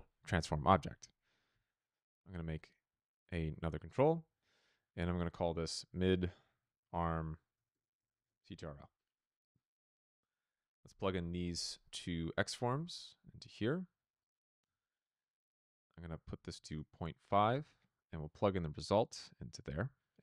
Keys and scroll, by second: 5.2-6.3 typing, 7.4-8.7 typing, 14.5 p, 16.6 Return, 17.6 p.